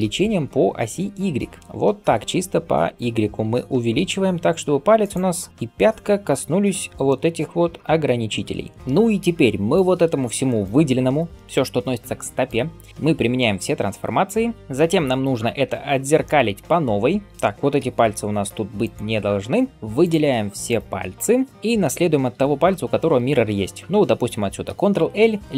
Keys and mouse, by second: 9.7-19.7 drag, 11.7 g, 12.9 ctrl+a, 15.5 Tab, 17.7 ctrl+l, 18.2 x, 19.7 shift+middle click, 20.5 shift+click, 20.6-25.5 shift+middle drag, 22.2 g, 24.5 ctrl+l.